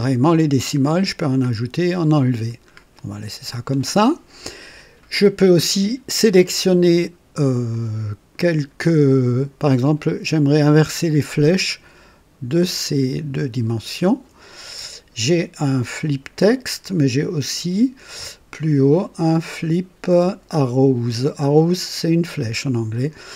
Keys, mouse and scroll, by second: 0.7-1.1 scroll up 2, 1.4-1.8 scroll down 2, 2.1 scroll down 2, 7.6 click, 10.8 click, 12.8 ctrl+click, 16.4-16.8 scroll up 2, 18.7 scroll up 2.